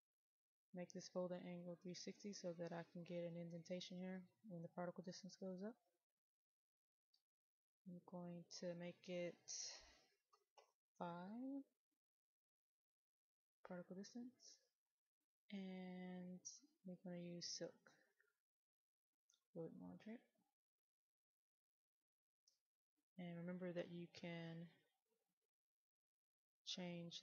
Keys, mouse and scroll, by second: 10.6 KP_5, 12.9-16.2 drag.